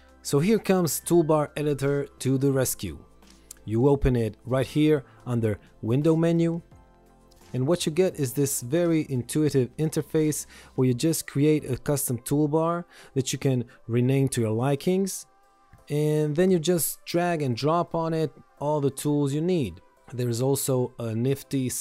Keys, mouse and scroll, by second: 12.8-14.7 typing, 16.8 click.